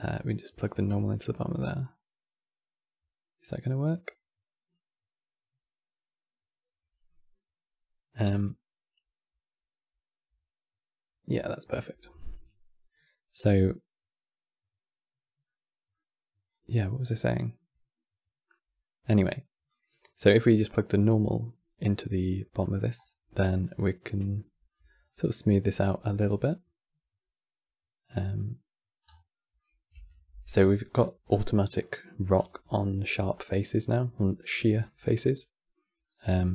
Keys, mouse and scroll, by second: 15.2-16.2 middle drag, 16.2 click, 19.4-22.3 drag, 22.3 middle click, 22.7-23.4 scroll up 4, 23.4 scroll up 4, 24.0 shift+middle click, 24.7 scroll up 4, 25.4-28.4 middle drag, 28.8 scroll down 6, 29.0-29.6 middle drag, 29.6 Tab, 30.2-31.1 scroll down 18, 31.5-32.0 middle drag, 32.1 scroll down 2, 32.5-33.0 shift+middle drag, 33.0-33.4 scroll up 2, 34.7-36.5 middle drag.